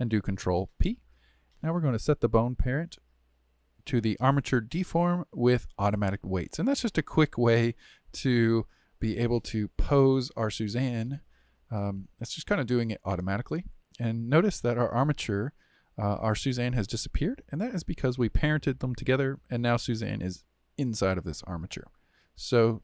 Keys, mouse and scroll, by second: 0.6 ctrl+p, 9.5-16.1 middle drag, 17.8 click, 21.6 click.